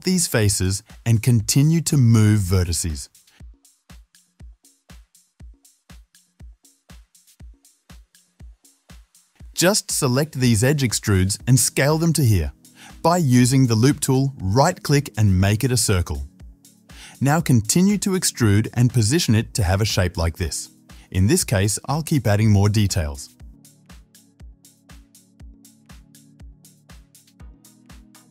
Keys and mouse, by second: 0.3 click, 0.6 ctrl+middle click, 0.8 ctrl+click, 1.0-2.9 middle drag, 1.3 x, 2.9 click, 3.0 shift+middle click, 3.3 typing, 3.4 click, 3.6 middle click, 4.0 alt+shift+click, 4.1-5.1 middle drag, 5.1-6.4 drag, 6.4 ctrl+middle click, 6.4 typing, 7.4 ctrl+click, 7.8 ctrl+click, 8.4-9.4 drag, 10.2 click, 10.3-14.0 middle drag, 10.7 KP_7, 11.7 e, 14.0-17.4 right drag, 16.5-19.5 typing, 17.4-22.5 drag, 20.3 ctrl+f, 21.4 middle click, 21.4 right click, 22.0 shift+middle click, 22.0 shift+right click, 22.8-25.2 middle drag, 23.3 e, 25.0 1, 25.2 ctrl+click, 26.2 middle click, 26.2 ctrl+click, 27.0 shift+middle click, 27.2 shift+z, 27.4 shift+click, 27.6 shift+z, 28.0 shift+z, 28.0 middle click, 28.1 click.